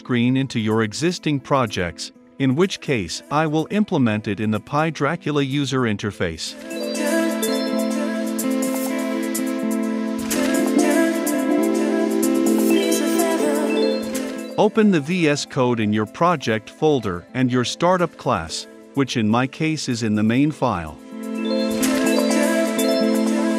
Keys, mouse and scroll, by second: 0.1 click, 3.7 click, 4.1-5.4 typing, 6.4-13.4 drag, 13.4-15.8 right drag, 15.8-21.2 drag, 23.1-23.5 drag.